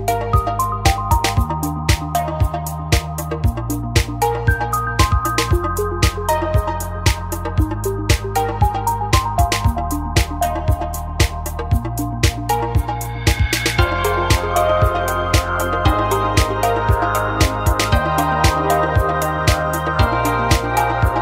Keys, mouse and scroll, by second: 15.7 shift+a, 17.5 KP_1, 18.3 s, 20.5 click, 20.6 g.